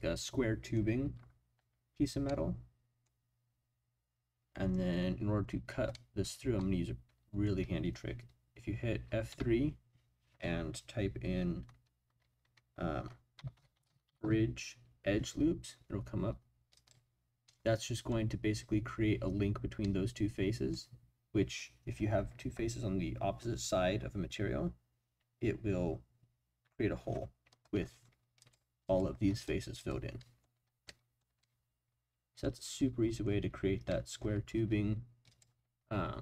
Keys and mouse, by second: 2.3 middle click, 5.9 middle click, 6.6 middle click, 9.3 F3, 17.5 click, 19.8 middle click, 28.4 click, 28.8 click, 29.3 click, 29.8 click, 30.2 middle click, 30.8-33.2 middle drag, 33.9 middle click, 35.3 click.